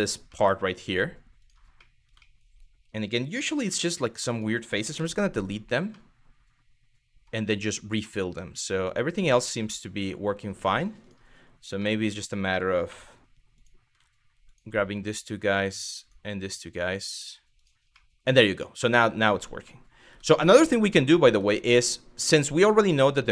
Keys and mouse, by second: 0.0 middle click, 1.0 click, 1.5 middle click, 1.9 middle click, 3.3 3, 4.6 x, 5.7-6.9 middle drag, 7.6-10.0 middle drag, 10.6 click, 11.5 middle click, 12.5 2, 13.2 click, 14.1 click, 14.4 f, 15.1 click, 16.0 f, 17.2 click, 17.5 middle click, 18.6 middle click, 18.9 Tab, 19.3 middle click, 19.7 Tab, 20.2 middle click, 20.7 middle click, 20.9 Tab, 21.4 middle click, 22.5 click.